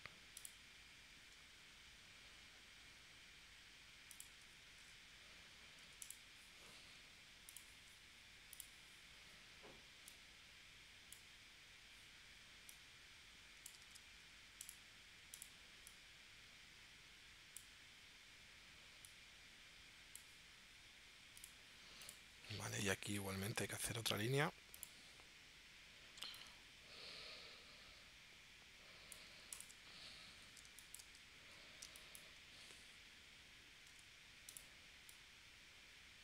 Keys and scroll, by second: 4.8 shift+c, 5.8 a, 13.8 super+z, 23.3 p, 30.7 space, 31.9 space, 33.9 a.